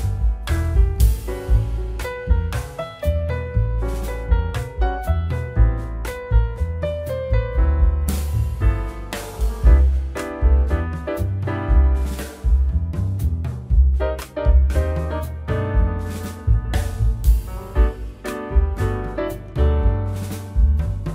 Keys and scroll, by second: 4.9 k, 6.5 Return, 14.6 a, 17.1 k, 17.9 a, 18.9 Return, 20.9 a.